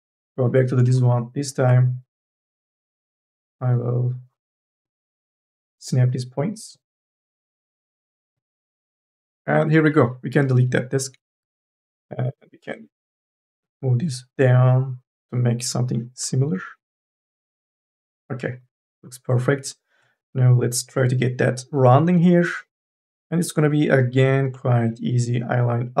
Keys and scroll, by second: 0.0 1, 0.7 space, 2.5 ctrl+z, 11.0 Delete, 12.4 1, 22.6 2, 22.9 e.